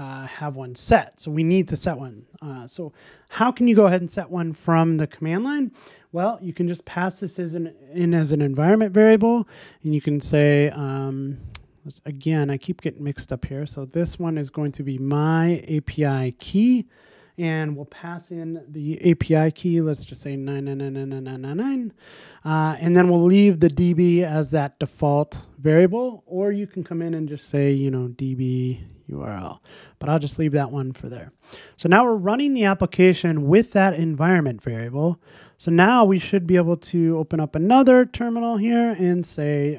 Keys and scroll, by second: 37.2 super+t.